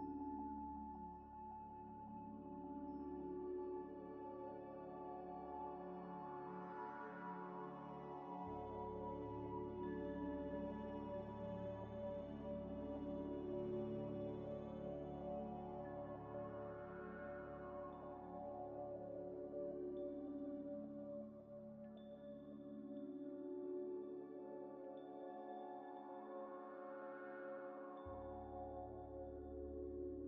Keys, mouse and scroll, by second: 3.0 Escape, 3.5 Escape, 3.6 scroll up 2, 3.8 ctrl+a, 5.7 scroll up 1, 5.9 Tab, 6.2 1, 6.7 ctrl+v, 7.6 ctrl+ئ, 8.1-12.0 typing, 12.8 double click, 13.1 ل, 14.1-16.8 typing, 14.9 double click, 16.4 double click, 16.7 double click, 18.2 ctrl+ئ, 19.2 scroll up 1, 19.8 double click, 20.8 ctrl+z, 21.8 double click, 22.3 ctrl+z, 23.4 ctrl+z, 23.5 ctrl+z, 25.5 Tab, 25.7 3, 26.2 ctrl+z, 26.7 Tab, 26.8 3, 28.1 alt+click, 28.7 shift+click, 29.5 middle click, 29.8 Tab, 30.0 scroll down 1.